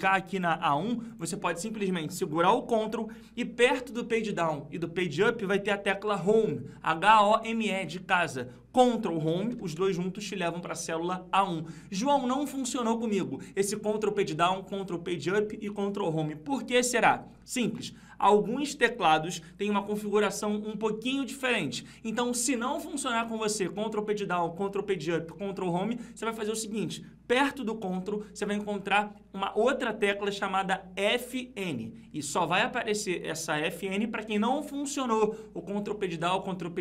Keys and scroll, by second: 9.4 ctrl+Home.